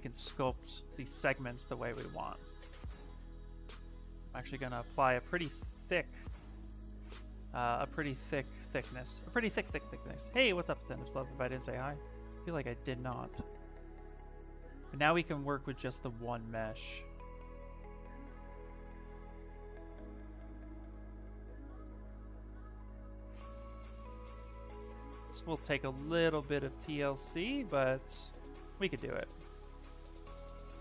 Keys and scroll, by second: 7.7 shift+f, 12.9 s, 24.0 ctrl+z, 24.2 s, 30.1 s.